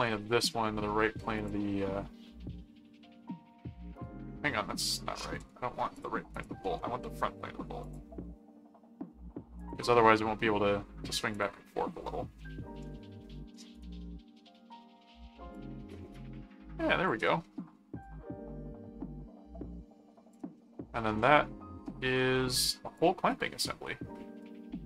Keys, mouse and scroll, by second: 1.4 click, 5.9 click, 7.8 click, 9.6 click, 11.3 click, 12.4 middle click, 13.7 right click, 15.5-17.0 drag, 17.4 middle click, 18.0-20.3 drag, 20.5 middle click, 21.8 middle click, 23.0-24.8 drag.